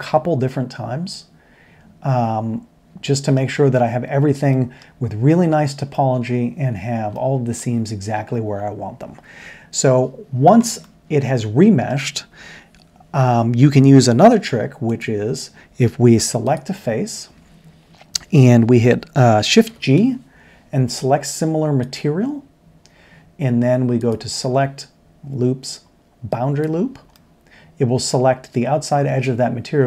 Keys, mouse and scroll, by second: 4.5-4.8 middle drag, 10.7 middle drag, 16.2 3, 19.6 shift+g, 27.1 middle drag, 27.4 click, 27.6-28.0 middle drag, 28.6-29.4 middle drag.